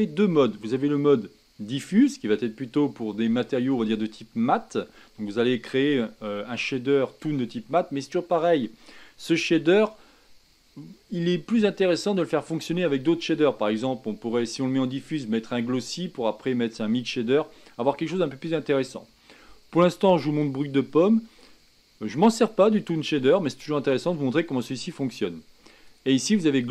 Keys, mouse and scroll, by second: 2.0-26.7 drag.